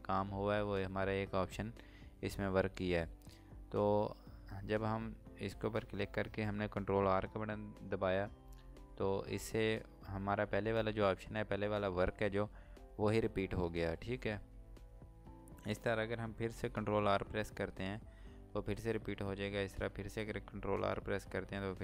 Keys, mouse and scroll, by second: 20.0 ctrl+r.